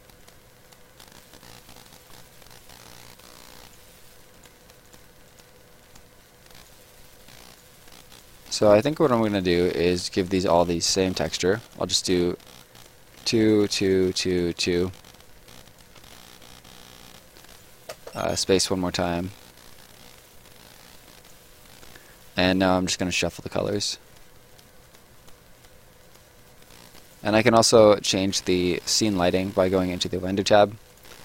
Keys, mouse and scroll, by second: 1.0 right click, 2.1 scroll down 1, 2.3 right click, 4.3 click, 6.4 right click, 10.2 click, 10.9 1, 11.6 click, 11.9 2, 12.7 click, 13.2 2, 13.4 click, 13.6 2, 13.8 click, 14.0 2, 14.2 click, 14.4 2, 15.1-15.4 scroll up 1, 15.6 click, 15.9 3, 17.3 right click, 17.9 space, 18.8 right click, 21.6 right click, 23.1 click, 26.6 right click, 28.1 click.